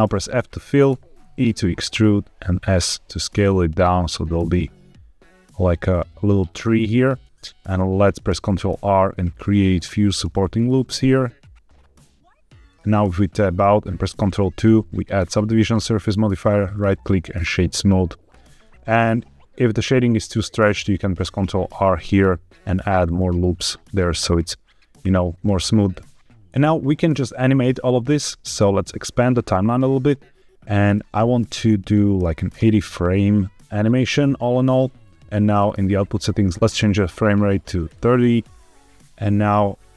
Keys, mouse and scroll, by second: 0.8 e, 1.7 click, 1.9 s, 4.0 click, 4.2 g, 4.3 z, 6.8 click, 8.2 ctrl+r, 9.6 click, 10.1 ctrl+r, 12.5 click, 12.8 Tab, 14.2 ctrl+2, 16.5 right click, 18.4 Tab, 21.1 ctrl+r, 22.9 right click, 23.4 Tab, 24.9-25.8 scroll down 2, 25.8-26.1 middle drag, 26.2-27.2 scroll up 1, 29.0-32.4 drag, 35.5 click, 36.5 click, 39.7-39.9 drag.